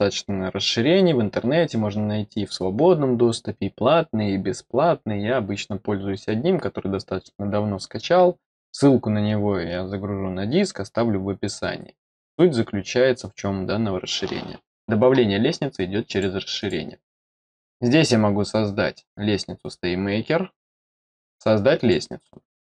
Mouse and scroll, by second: 16.0 click, 16.5 click, 21.7 click.